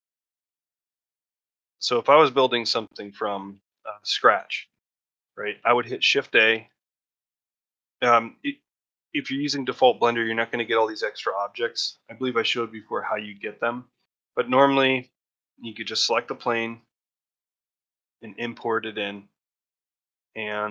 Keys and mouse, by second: 0.0 ctrl+middle drag, 1.2 shift+middle drag, 1.4-2.2 middle drag, 2.4 shift+middle drag, 2.7-4.0 middle drag, 4.0 shift+middle drag, 4.6 ctrl+middle drag, 4.8 shift+middle drag, 6.4 shift+a, 17.3-17.9 middle drag, 18.1-18.4 middle drag, 18.7 middle click, 19.0-19.3 ctrl+middle drag, 19.7-20.2 middle drag, 20.3-20.7 middle drag.